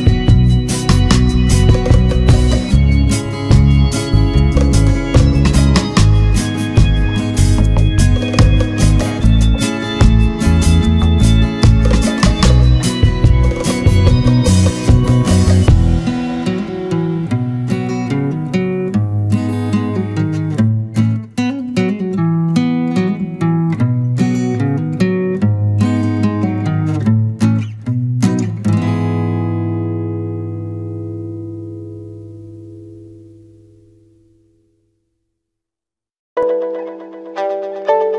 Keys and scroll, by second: 3.0 ctrl+-, 3.9 ctrl+=, 4.2 ctrl+space, 16.4 ctrl+z, 23.4 ctrl+z, 28.4 ctrl+z, 29.3 ctrl+=, 29.5 ctrl+space, 30.0 ctrl+=, 36.0 ctrl+z.